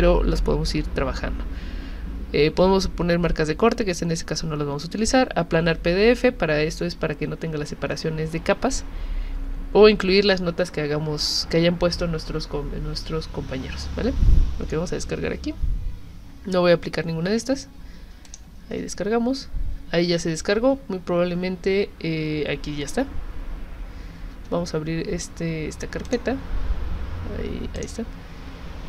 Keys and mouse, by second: 18.3 click, 26.1 click, 27.8 click.